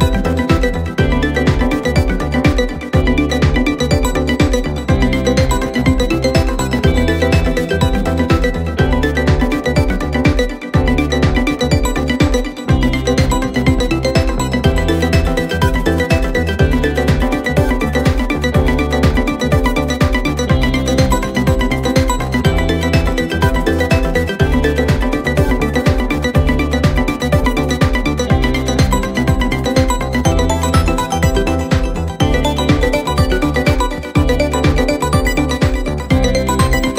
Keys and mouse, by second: 0.1 middle click, 1.6 middle click, 2.6 middle click, 3.4 middle click, 4.0 middle click, 7.2 middle click, 7.7 middle click, 8.0 middle click, 10.2 middle click, 10.7 middle click, 11.0 middle click, 11.9 middle click, 12.3 middle click, 12.9 middle click, 14.1 middle click, 14.5 middle click, 14.9 middle click, 16.0 middle click, 16.2 middle click, 16.7 middle click, 17.8 middle click, 18.7 middle click, 19.1 middle click, 19.7 middle click, 19.9 middle click, 20.4 middle click, 20.8 middle click, 21.0 middle click, 21.3 middle click, 22.4 middle click, 23.0 middle click, 23.3 middle click, 23.6 middle click, 24.1 middle click, 24.7 middle click, 24.9 middle click, 25.2 middle click, 25.7 middle click, 26.2 middle click, 26.7 middle click, 27.2 middle click, 27.8 middle click, 28.2 middle click, 28.7 middle click, 29.7 middle click, 29.9 middle click, 31.3 middle click, 31.9 middle click, 33.0 middle click, 35.9 middle click.